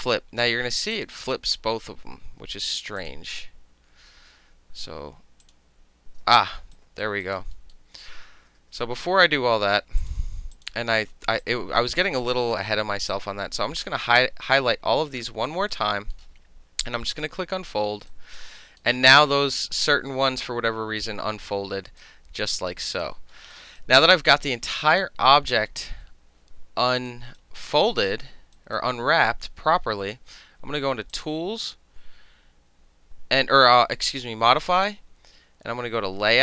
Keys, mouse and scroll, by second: 0.0 middle click, 0.9 click, 1.7 ctrl+z, 2.0 ctrl+z, 3.0 click, 5.4 click, 6.4 ctrl+z, 6.8 alt+right click, 7.2 alt+right click, 7.6 alt+middle click, 8.3 ctrl+alt+z, 8.6 ctrl+alt+z, 10.0 click, 11.4 click, 13.1-14.3 drag, 14.3-15.5 middle drag, 15.5 alt+right click, 15.7 alt+middle drag, 16.1-17.1 alt+middle drag, 17.1 click, 18.1 alt+click, 18.6 alt+middle click, 22.0 alt+right click, 22.8 alt+right click, 23.3 alt+middle click, 23.8 alt+right click, 25.0 click, 27.1 alt+right click, 27.7 alt+middle click, 28.6 alt+right click, 31.1 click.